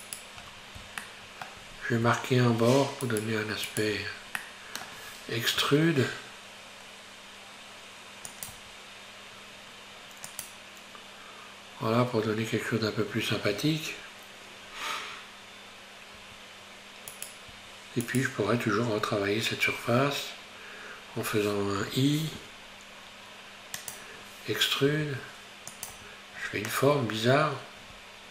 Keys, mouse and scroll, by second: 0.5-1.1 scroll down 4, 1.1 shift+middle click, 1.8 scroll up 2, 3.0 shift+right click, 3.7 shift+right click, 4.1-4.4 scroll down 3, 4.4-5.6 middle drag, 5.6 e, 8.5 Tab, 10.4 click, 13.8 Tab, 14.8 scroll up 1, 16.2 Tab, 17.2 right click, 17.6 Tab, 18.2 right click, 19.2 scroll up 1, 25.1 e, 26.1 Tab, 26.6 scroll down 3.